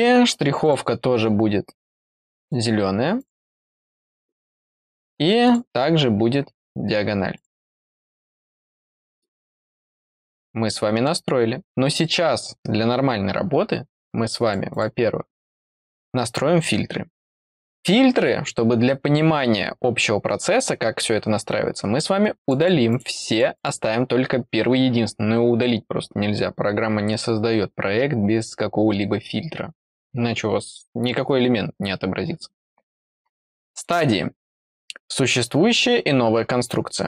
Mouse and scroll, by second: 0.6 click, 2.4 click, 3.2 click, 5.4 click, 6.3-7.3 middle drag, 7.3 click, 7.5 middle click, 8.0 click, 14.4 click, 14.7 click, 18.1 click, 22.4 click, 22.6 click, 22.9 click, 23.1 click, 23.3 click, 23.5 click, 33.7 click.